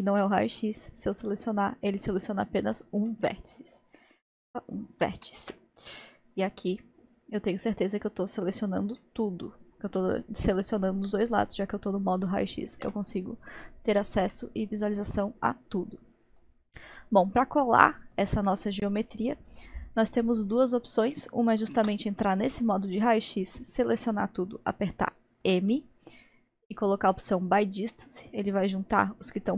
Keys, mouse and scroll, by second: 3.1-5.3 middle drag, 5.3 alt+z, 6.0 click, 9.0-12.2 middle drag, 12.8 alt+z, 14.4-18.1 middle drag, 19.6 scroll down 1, 20.3-20.9 scroll up 1, 21.8 alt+z, 22.8-24.3 drag, 25.4 m.